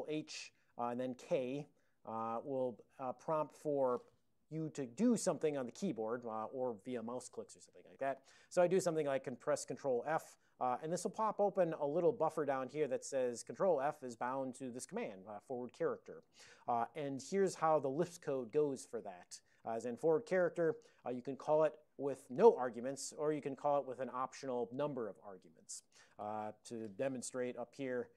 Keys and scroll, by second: 0.2 ctrl+h, 10.1 ctrl+f, 27.7 alt+o.